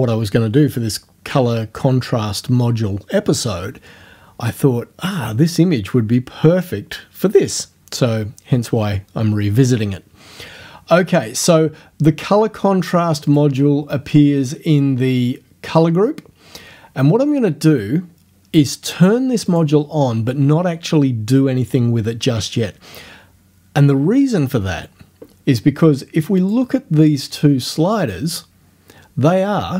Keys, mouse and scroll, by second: 13.3 click, 19.5 click, 26.4 click.